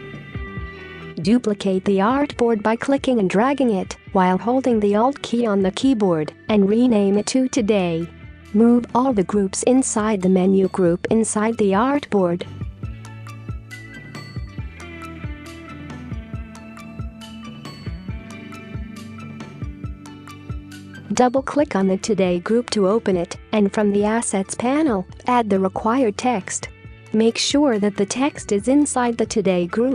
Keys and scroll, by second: 4.7-5.4 typing.